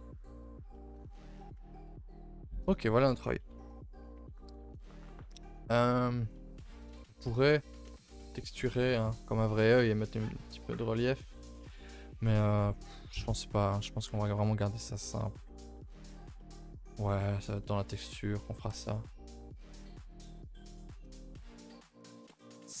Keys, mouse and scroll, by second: 0.8 middle drag, 1.1 a, 1.3 3, 1.4 scroll down 2, 1.5 middle drag, 1.8 ctrl+s, 4.3 click, 5.4-7.3 scroll up 2, 13.7 a, 13.8 a, 14.2 ctrl+s, 15.7-17.5 middle drag, 17.5 KP_3, 18.7 KP_0, 20.1-22.8 drag.